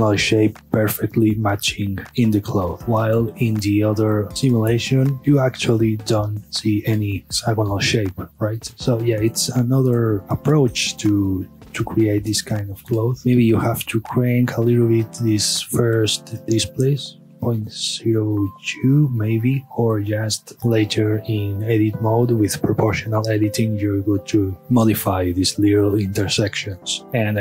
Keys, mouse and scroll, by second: 0.8-2.0 scroll down 1, 2.1-2.8 middle drag, 2.8 KP_Divide, 3.5 shift+middle click, 4.0 click, 4.5 KP_Divide, 5.2-6.8 middle drag, 8.7 KP_Divide, 8.9-9.3 scroll down 2, 9.3 scroll up 2, 9.6-10.8 middle drag, 10.8-11.2 scroll down 1, 11.2-13.0 middle drag, 13.0 scroll up 1, 13.2 click, 16.3-18.4 drag, 18.4 KP_2, 18.5 KP_Enter, 19.6-20.1 middle drag, 20.1 scroll up 2, 20.3-21.7 middle drag, 21.7-23.0 scroll down 2, 23.7-25.6 middle drag, 25.6-26.3 scroll up 2, 26.3 scroll down 2, 27.0 shift+middle click, 27.1 scroll up 1.